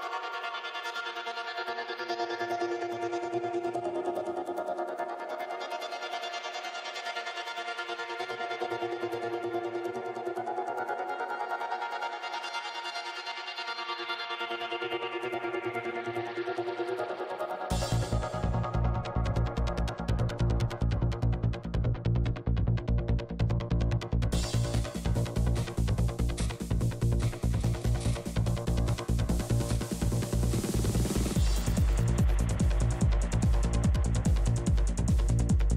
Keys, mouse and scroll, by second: 0.4-2.3 drag, 0.5 shift+f, 1.7-4.1 middle drag, 2.9-4.1 drag, 4.1 g, 4.1 f, 4.4 click, 4.4-5.7 middle drag, 5.7-6.8 drag, 5.8 middle click, 6.8-9.6 middle drag, 8.6 f, 8.8-10.6 drag, 9.7 f, 9.9-11.2 middle drag, 11.4 middle click, 12.5-13.8 drag, 12.6-13.8 right drag, 12.8-16.7 typing, 14.2 click, 14.2 right click, 14.9-16.1 middle drag, 15.1 click, 16.1 click, 16.7 click, 17.1 middle click, 17.9 r, 18.5 click, 18.5 g, 19.2 a, 21.5 r, 21.5 x, 22.5-23.9 drag, 22.8 r, 24.1-25.5 drag, 24.1-25.1 middle drag, 25.5 middle click, 26.1 g, 26.1 f, 26.4-27.7 drag, 27.1 right click, 27.8 f, 30.0 f, 30.3-31.7 drag, 30.7 f, 31.4 right click, 31.7 f, 31.9-33.9 drag, 34.9 f, 35.0-35.7 drag.